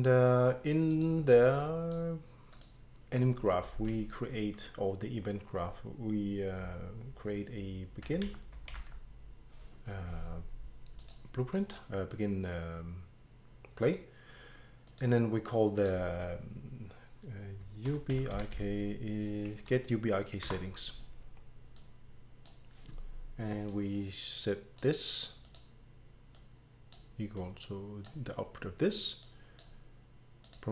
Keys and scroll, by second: 7.8-9.3 typing, 17.6-19.0 typing, 20.5 Return.